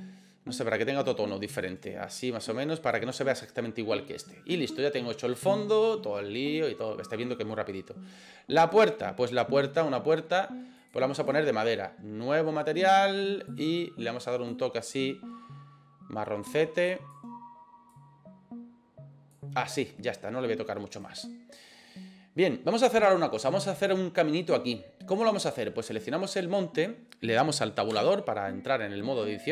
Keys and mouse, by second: 8.6 right click, 10.8 click, 11.2 click, 13.5 click, 20.9 right click, 25.9 right click, 28.1 Tab.